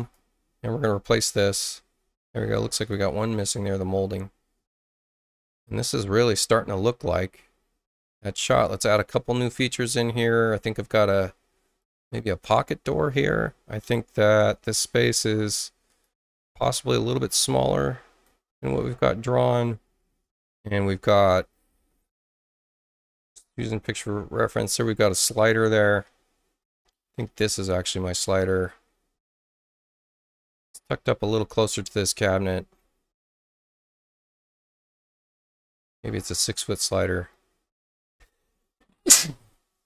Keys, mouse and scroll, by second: 2.7 click, 11.8 click, 14.5 space, 15.3 space, 16.0 click, 17.1-18.2 drag, 22.7-23.3 scroll up 4, 23.5 scroll down 2, 28.2 click, 29.2 space, 29.8 click, 31.2-32.5 drag, 33.8-35.5 drag.